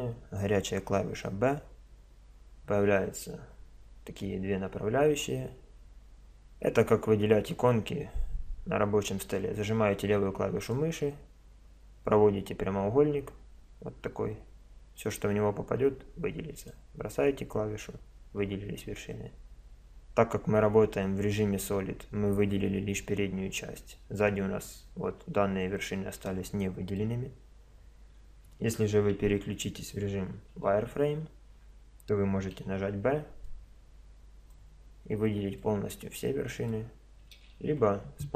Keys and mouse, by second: 1.4 b, 23.0-24.0 middle drag, 24.4-26.3 middle drag, 27.0-28.9 middle drag, 29.2 a, 30.6 z, 32.6 b, 37.4 a, 37.8 c.